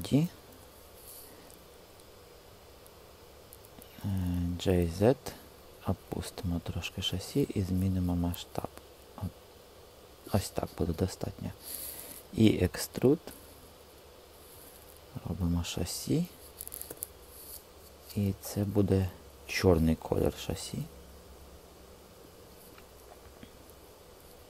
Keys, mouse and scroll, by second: 0.4 Return, 4.3 g, 4.9 z, 7.0 s, 10.2 click, 12.1 e, 14.6 click, 16.7 l, 18.7 click, 20.1 g, 23.5-24.4 drag.